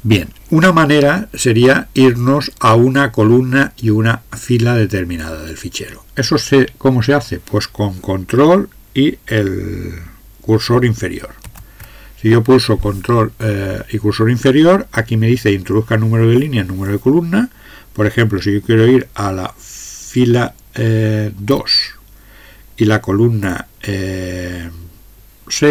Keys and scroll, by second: 21.5 2.